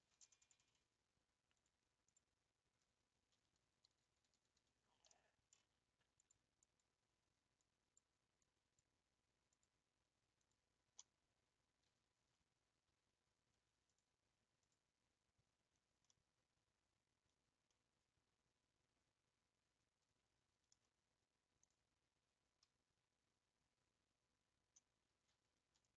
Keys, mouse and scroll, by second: 12.9 a, 14.7 click, 15.3 scroll down 1, 15.4-16.0 scroll up 8, 16.1-20.7 middle drag, 20.9-21.7 scroll up 1, 21.7 click, 24.9 scroll up 1.